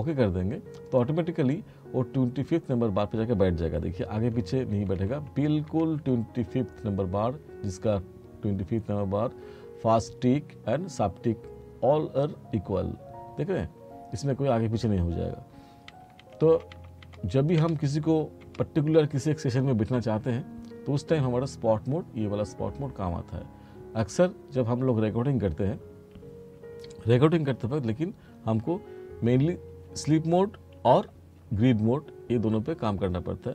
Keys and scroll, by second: 4.2 t, 16.0 r, 29.8 F2, 31.4 F4.